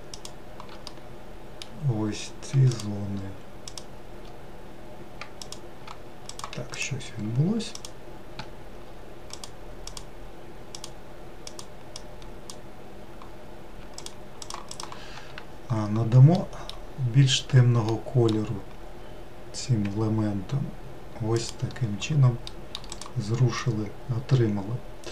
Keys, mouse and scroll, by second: 0.6-1.7 middle drag, 1.7 scroll up 1, 6.1 click, 6.5 click, 8.6-9.2 scroll up 2, 9.2 click, 9.7 click, 13.8 shift+click, 14.2 shift+click, 19.6 g, 22.3 middle click, 22.7 click, 23.4-25.1 middle drag.